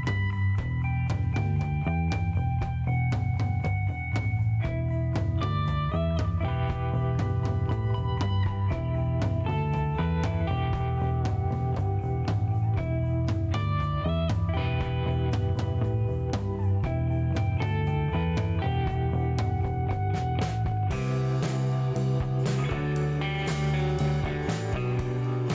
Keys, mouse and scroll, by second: 1.8 click, 4.4 click, 8.4 click, 10.1 right click, 11.0 click, 12.9 click, 15.8 click, 16.6 middle click, 18.5 click, 20.6 click, 22.1 click, 22.8 right click, 23.9 click.